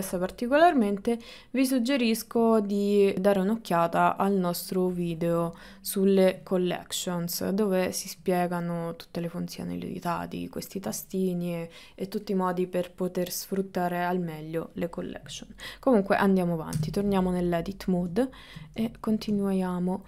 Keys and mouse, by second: 16.8 Tab, 18.6 middle click, 19.1 ctrl+middle click, 19.6 shift+middle click.